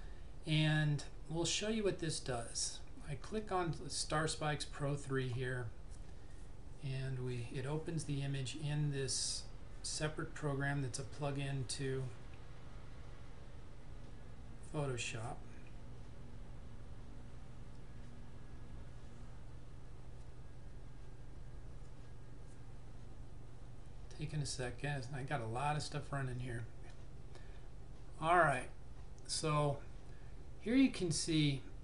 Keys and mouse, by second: 5.4 click, 27.0 click.